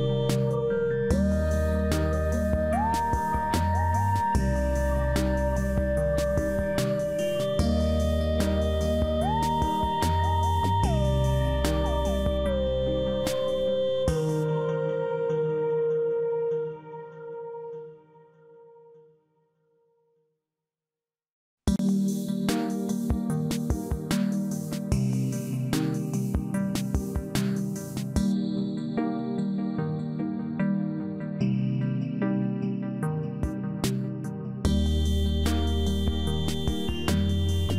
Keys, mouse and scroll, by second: 6.3 click, 7.5 click, 10.8 click, 14.1 click, 14.9 click, 23.3 click, 26.8 click, 31.2 click, 35.0 s.